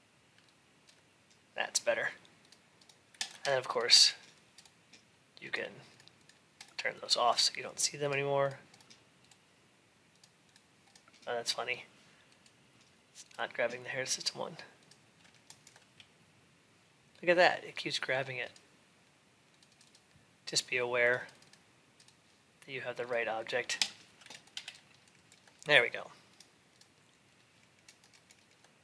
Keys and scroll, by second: 24.3 alt+x.